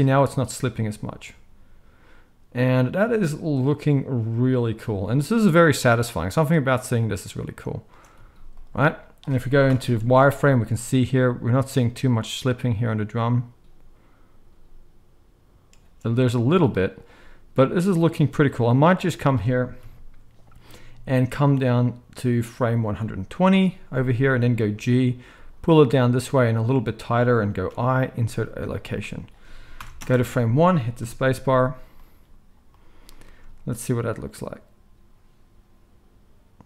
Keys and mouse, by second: 7.8 space, 8.1 z, 9.6 shift+Left, 10.0 space, 15.7 space, 16.6 z, 19.8 KP_1, 24.7 g, 26.9-36.6 middle drag, 27.6 i, 29.8 shift+Left, 29.9 space, 31.0 KP_0, 31.5 shift+Left.